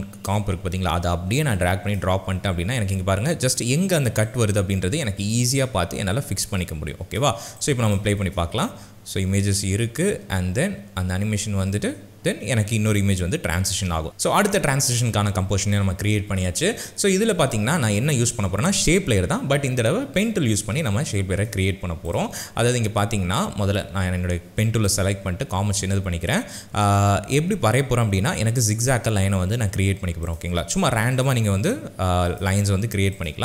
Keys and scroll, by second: 8.2 space, 12.8 space.